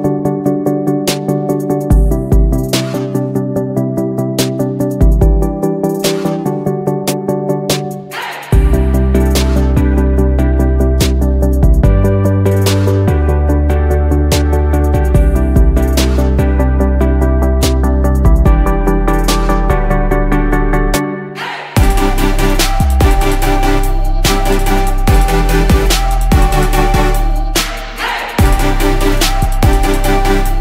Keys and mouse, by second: 7.3-10.7 drag, 13.5 click, 23.2 click, 23.8-25.1 drag.